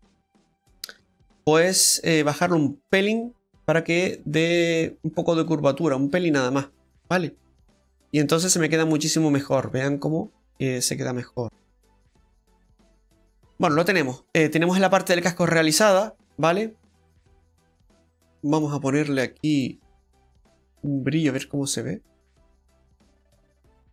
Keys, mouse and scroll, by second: 0.0 right click, 1.1 middle click, 1.7 scroll down 1, 2.5 click, 6.6 scroll down 2, 6.8 middle click, 7.4 right click, 7.7 middle click, 8.6 Tab, 9.0 middle click, 13.2 Tab, 13.2 right click, 13.2 middle click, 13.2-13.6 scroll down 3, 13.9 middle click, 13.9 scroll down 1, 14.5 scroll down 1, 14.9 middle click, 18.5 click, 22.2 ctrl+z, 22.2 click, 22.9 middle click.